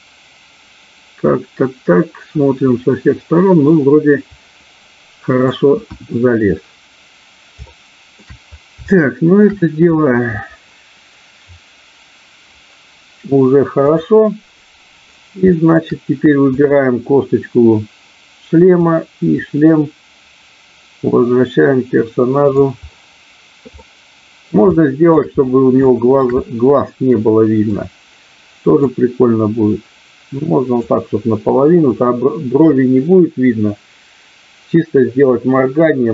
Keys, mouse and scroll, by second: 5.9 KP_1, 7.7 middle click, 8.8 scroll up 1, 9.0 shift+middle click, 13.9 click, 15.4 shift+middle click, 18.8-22.7 drag, 23.8-24.4 scroll up 1, 24.8 shift+middle click, 25.1 scroll down 1, 25.8 shift+middle click, 26.3-27.7 middle drag, 28.8-30.8 drag.